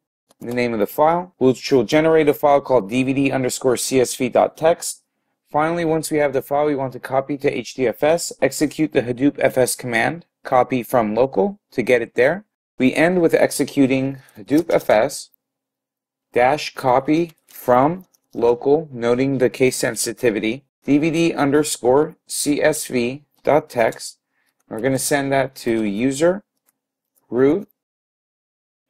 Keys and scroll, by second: 0.0-1.3 typing, 14.6-15.4 typing, 20.8-21.7 typing.